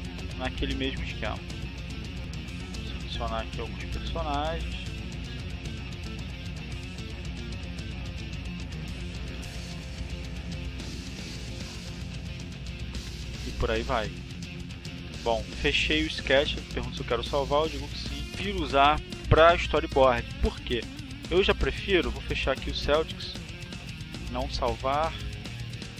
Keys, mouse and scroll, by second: 1.0 click, 2.2 click, 3.3-4.5 drag, 4.8-5.8 drag, 6.3 click, 7.0-8.5 drag, 8.8-10.1 drag, 11.1 click, 13.3 click, 14.7 click, 18.3 click, 21.5 click, 22.9 click, 24.6 click, 25.8 click.